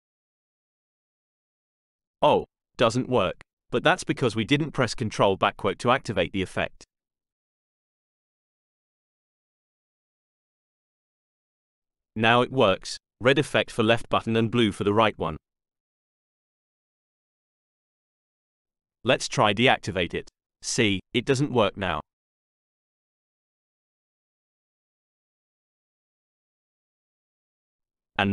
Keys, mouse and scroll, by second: 0.0 click, 1.0 click, 7.5 ctrl+`, 8.8 click, 12.5 click, 15.1 click, 17.0 click, 18.1 ctrl+`, 20.3 click, 23.8 ctrl+`, 27.3 click, 27.6 click.